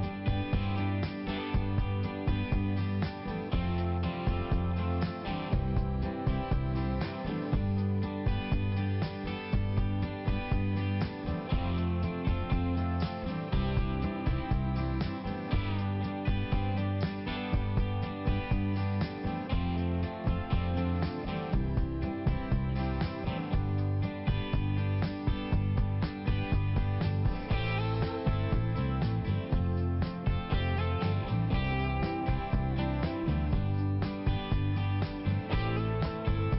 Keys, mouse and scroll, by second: 0.2 click, 0.4 click, 0.6 double click, 1.1 double click, 1.5 double click, 1.6 double click, 1.8 double click, 2.2 double click, 2.3 double click, 2.5 double click, 2.7 double click, 2.9 double click, 3.0 double click, 3.3 double click, 3.4 double click, 3.8 double click, 4.3 double click, 4.7 click, 4.9 click, 5.0 click, 5.1 double click, 5.5 double click, 5.8 double click, 5.9 double click, 6.4 double click, 7.7 click, 8.1 click, 8.3 click, 8.7 click, 8.8 double click, 9.0 double click, 9.3 double click, 9.9 click, 10.3 click, 10.8 click, 11.3 click, 11.4 click, 11.6 click, 11.8 double click, 12.0 double click, 12.5 click, 12.9 click, 13.0 double click, 13.1 double click, 13.6 click, 14.1 click, 14.2 click, 14.4 click, 14.8 click, 14.9 click, 15.0 click, 15.1 double click, 15.3 double click, 15.4 double click, 15.6 double click, 15.7 double click, 16.3 double click, 16.8 click, 17.2 click, 17.3 click, 17.5 click, 17.9 click, 18.0 click, 18.4 click, 19.9 click, 21.3 ], 21.5 click, 21.9 click, 22.1 click, 22.3 click, 22.4 double click, 22.7 double click, 22.8 double click, 23.1 double click, 23.5 click, 23.7 click, 23.8 click, 23.9 double click, 25.5 click, 26.4 click, 26.7 click, 27.2 click, 27.7 click, 28.0 click, 28.5 click, 28.6 click, 28.8 click, 28.9 double click, 29.1 double click, 29.2 double click, 29.5 double click, 29.6 double click, 29.9 double click, 30.1 double click, 30.2 double click, 30.4 double click, 30.8 double click, 32.3 click, 32.7 click, 32.8 click, 33.0 click, 33.1 double click, 35.4 click, 36.1 ], 36.4 click.